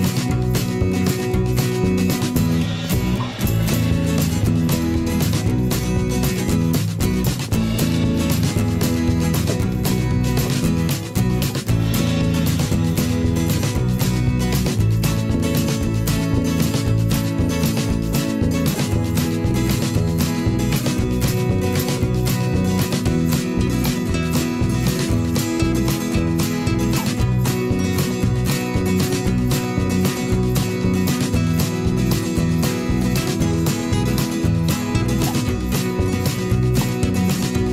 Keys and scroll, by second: 4.0 v, 4.7 ctrl+[, 17.6 ctrl+[, 23.2 ctrl+], 23.4 ctrl+[, 23.8 ctrl+], 24.2 ctrl+[, 25.0 v, 29.9 ctrl+shift+[, 30.1 ctrl+].